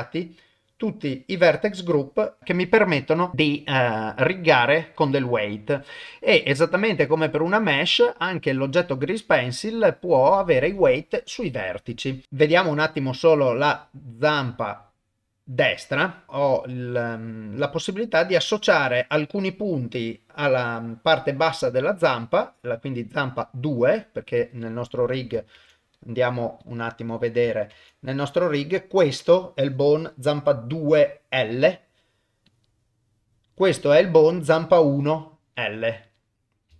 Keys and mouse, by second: 1.2 middle click, 12.2 click, 12.2 middle click, 13.8 click, 14.6 click, 16.3 middle click, 16.3 KP_0, 16.9 middle click, 22.8 click, 25.1 click, 25.6 ctrl+Tab, 27.1 click, 27.7 ctrl+Tab, 28.3 click, 32.5 click, 36.1 click.